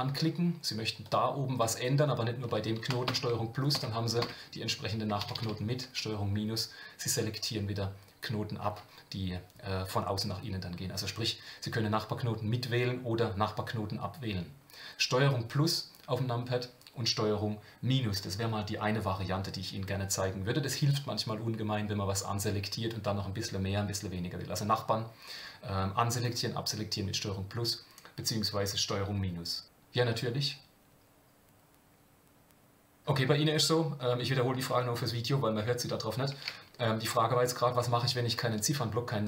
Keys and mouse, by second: 1.0 click, 1.7 middle click, 3.0 ctrl+KP_Add, 5.2 ctrl+KP_Subtract, 5.2 ctrl+KP_Multiply, 5.4 ctrl+KP_Subtract.